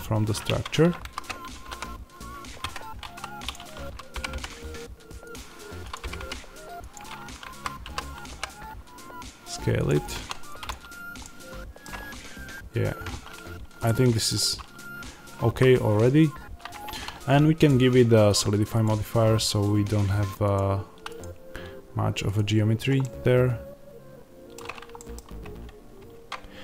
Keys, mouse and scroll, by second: 0.3 Tab, 0.9 a, 2.6 Escape, 3.0 2, 3.4 click, 4.0 g, 5.2 click, 5.9 g, 6.8 click, 7.3 a, 9.7 click, 10.0 1, 10.6 click, 11.1-18.7 middle drag, 11.9-12.5 scroll up 2, 12.5-13.8 scroll down 2, 15.4 a, 16.6 Tab, 18.7-22.9 drag, 22.9-26.6 middle drag, 25.3 Tab.